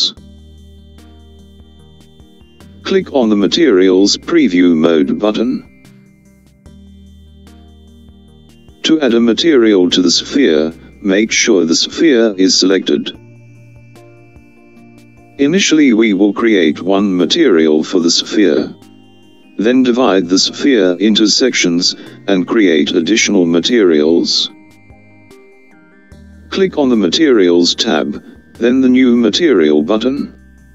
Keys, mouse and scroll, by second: 7.5 click, 13.5 click, 28.4 click.